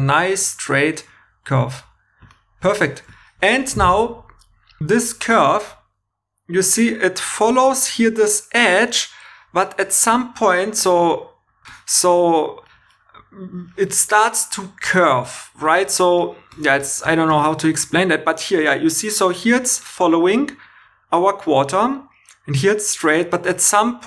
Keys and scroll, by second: 7.9 2.